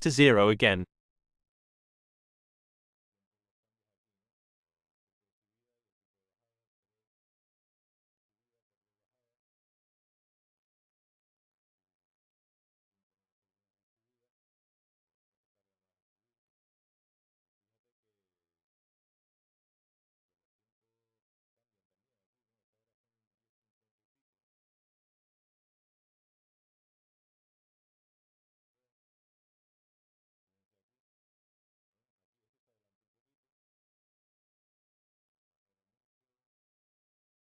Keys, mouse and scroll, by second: 0.1 BackSpace, 0.4 Return, 1.6 click, 2.7 click, 3.8 click, 9.4-10.6 drag, 11.5 5, 13.4 Return, 25.9-27.3 drag, 28.4 2, 31.2 Return, 33.9 click, 35.7 1, 36.4 0, 37.3 Return.